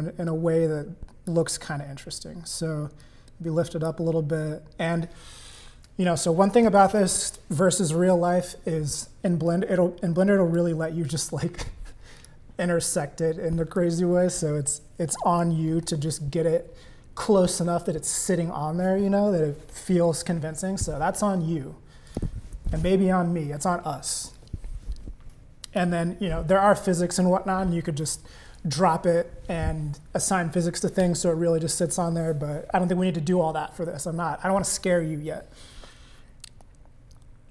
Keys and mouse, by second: 0.3-1.3 drag, 3.0 click, 6.0 click, 9.5-10.6 drag, 12.2 click, 22.0 click, 24.3-25.8 drag.